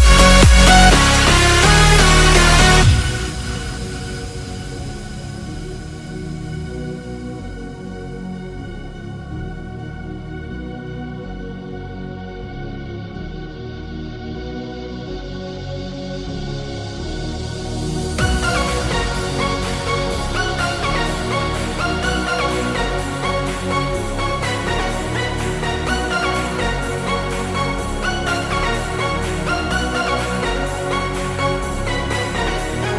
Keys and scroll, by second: 0.4 ctrl+space, 0.9 space, 1.5 ctrl+space, 5.6 space, 6.2 space, 8.1 F5, 9.0 F5, 9.6 ctrl+space, 9.8 ctrl+space, 10.5 7, 11.2 space, 17.1 ctrl+space, 18.1 x, 19.6 z, 21.1 0, 22.2 space, 22.6 space, 23.0 space, 26.5 space, 26.8 space, 27.4 ctrl+space, 27.7 ctrl+space, 28.4 Delete, 29.1 ctrl+shift+n, 29.5 Return.